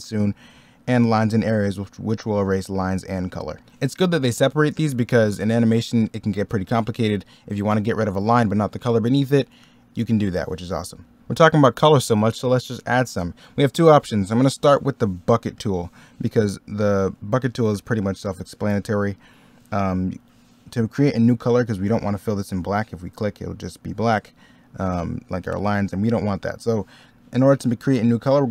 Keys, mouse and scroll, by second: 3.6 middle click, 11.0 middle click, 16.3 middle click, 19.1 middle click, 20.9 middle click, 24.7 middle click, 25.4 ctrl+z.